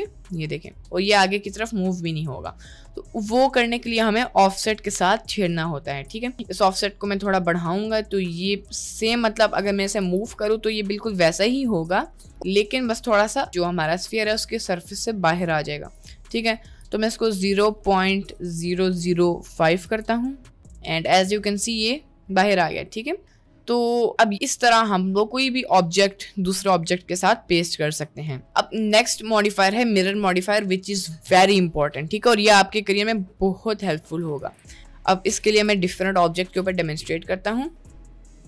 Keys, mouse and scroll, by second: 0.8 g, 2.6 middle click, 3.3 middle click, 6.1-8.3 drag, 8.9 g, 9.7 middle click, 10.1 g, 12.6-13.6 drag, 14.2 middle click, 16.0 click, 16.4 click, 17.6-20.4 drag, 18.9 0, 20.6 middle click, 21.3 click, 21.6 middle click, 22.0-22.4 middle drag, 22.6 middle click, 23.5-24.5 middle drag, 24.9 middle click, 29.1-30.1 drag, 31.3 Delete, 34.4 ctrl+a, 35.6 shift+a, 37.8 KP_Decimal, 38.2 click.